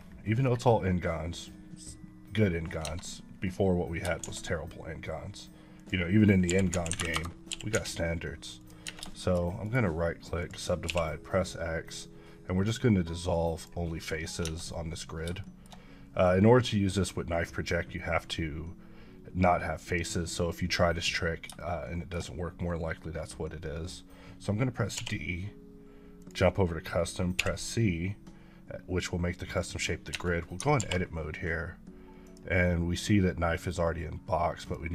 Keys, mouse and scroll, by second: 0.4-2.7 scroll down 3, 2.8 Tab, 4.2 shift+a, 5.8 click, 6.5-7.7 typing, 7.1 KP_Enter, 8.6 click, 8.9 Tab, 9.1 shift+middle click, 9.6 right click, 10.4 click, 10.9 x, 13.3 click, 14.4 Tab, 15.4 shift+middle click, 21.6 shift+double middle click, 25.0 d, 26.2 click, 27.4 c, 29.5 click, 30.1 Tab, 30.8 alt+w, 32.2 click.